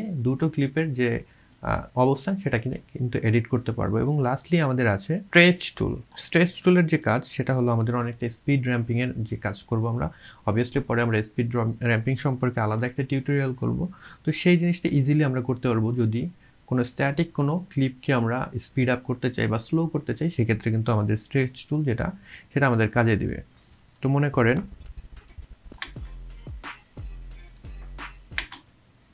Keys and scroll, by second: 25.9 space, 28.5 space.